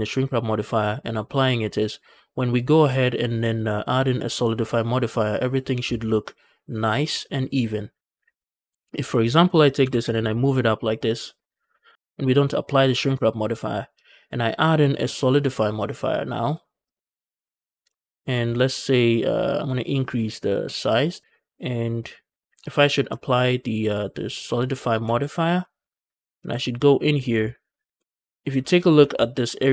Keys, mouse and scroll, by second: 8.4 Tab, 8.4 shift+middle click, 8.4 scroll up 1, 8.6 click, 9.1 shift+click, 9.7 g, 9.9 z, 11.5 shift+click, 11.9 Tab, 14.3-17.3 drag, 17.3 middle click, 17.8 shift+middle drag, 19.5-20.4 scroll down 3, 20.6 click, 21.2 middle click, 21.7 scroll down 1, 21.9 click, 24.9 ctrl+a, 25.4 middle click, 26.4 Tab, 26.6 middle click, 27.0 scroll up 1, 27.3 shift+middle click, 27.9 scroll down 1, 28.4 shift+middle click.